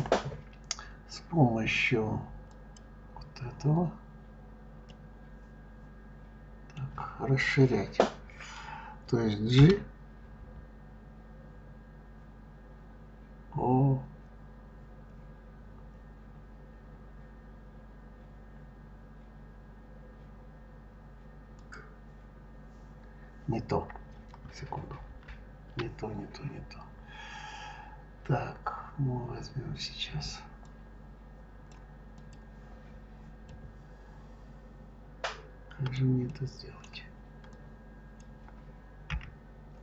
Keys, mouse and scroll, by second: 2.3 click, 4.7-7.7 middle drag, 9.4 g, 24.9 ctrl+z, 30.4-32.1 drag, 33.3-37.3 middle drag, 37.3 click, 38.9 b.